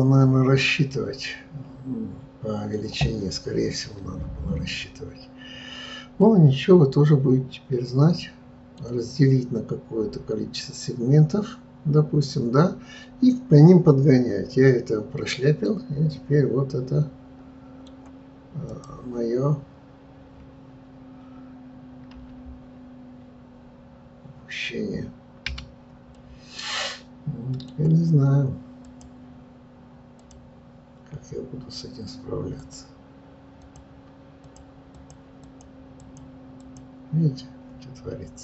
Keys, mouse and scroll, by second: 18.6 click, 22.2 r, 26.1-28.8 middle drag, 28.8 click, 30.1 click, 32.7-38.4 drag.